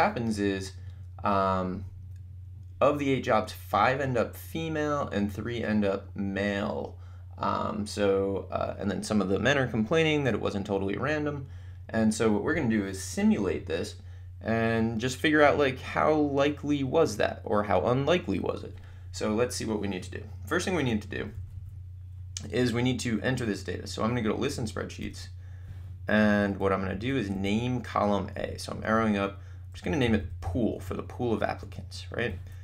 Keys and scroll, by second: 21.3 Down, 25.0 Return, 26.9 Up, 29.5-30.9 typing, 31.6 Return.